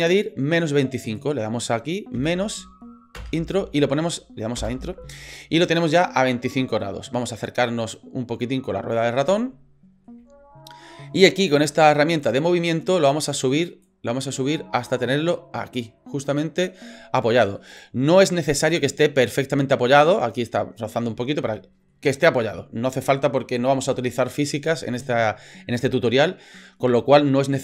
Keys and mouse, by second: 0.2-8.0 drag, 4.6 Return, 9.5 shift+middle click, 12.2 click, 14.0-16.7 drag, 17.4 shift+middle click, 17.7 right click, 18.6 shift+middle click, 21.5 shift+middle click.